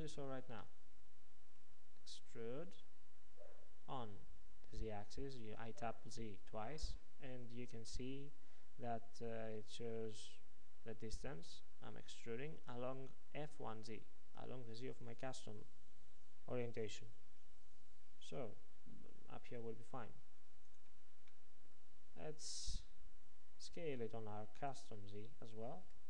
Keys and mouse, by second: 0.7 middle click, 2.4 e, 21.5 middle click, 23.3 s.